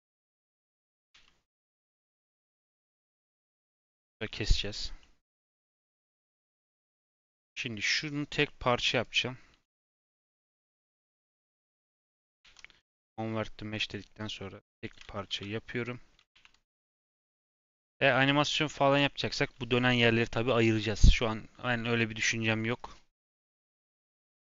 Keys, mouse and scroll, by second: 0.4 Tab, 1.1 /, 1.4-2.3 scroll down 7, 2.3 Tab, 2.5 scroll up 1, 2.7-3.3 scroll down 3, 2.9-3.2 middle drag, 4.0 /, 4.2-5.0 scroll down 5, 5.0-5.5 middle drag, 5.5-5.9 scroll up 2, 5.9 shift+middle drag, 6.1 scroll up 2, 6.6-9.0 middle drag, 9.0 click, 10.7 shift+click, 11.6 ctrl+j, 12.4 ctrl+z, 12.7-14.3 right drag, 14.3 click, 15.3 ctrl+j, 16.3 ctrl+a, 17.8 KP_1, 18.2 scroll up 2, 18.7-24.2 shift+middle drag, 24.2-24.5 scroll up 2.